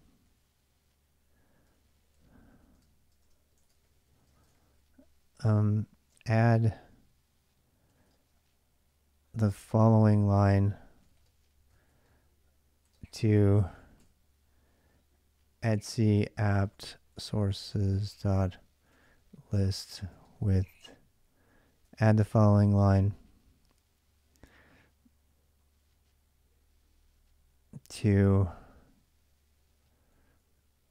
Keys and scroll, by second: 0.0 k, 1.2-8.3 typing, 9.7-14.3 typing, 15.6-22.6 typing, 27.2 BackSpace, 30.2-30.9 typing.